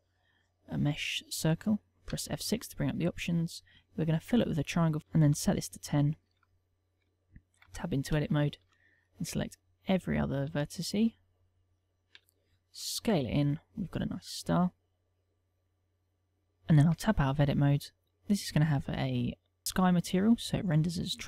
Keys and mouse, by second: 1.8 F6, 6.5 ctrl+middle click, 7.4 Tab, 8.1 shift+middle click, 8.5 ctrl+middle click, 9.1 click, 9.7 click, 10.3 shift+click, 10.7 click, 11.2 shift+click, 11.7 shift+click, 12.5 s, 18.6 Tab, 19.6 click, 19.6 middle click, 20.8 middle click.